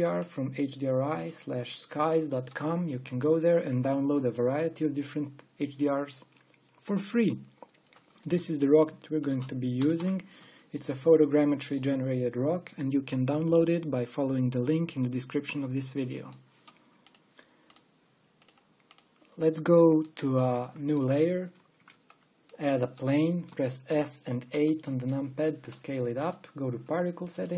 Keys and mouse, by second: 2.2 click, 2.8-9.1 drag, 9.1-10.5 middle drag, 10.5-11.6 drag, 11.6-13.2 middle drag, 13.2 click, 16.8 middle click, 18.0-19.1 drag, 20.5-22.3 drag, 22.3 shift+a, 24.1 s, 26.0-27.5 drag.